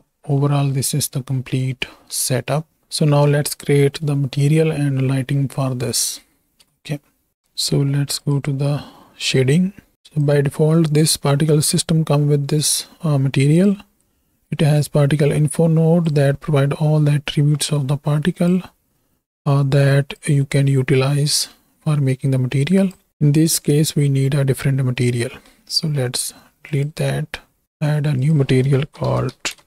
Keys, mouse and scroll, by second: 0.3 middle click, 2.4 middle click, 2.8 ctrl+space, 3.5 shift+middle click, 6.8 space, 7.4 space, 8.4 click, 10.4-11.0 drag, 11.6 middle click, 13.5 drag, 14.5-16.2 drag, 17.6 middle click, 18.3 click, 19.3 click, 20.5 middle click, 21.3 middle click, 25.3 middle click, 26.6 click, 28.2-29.6 drag.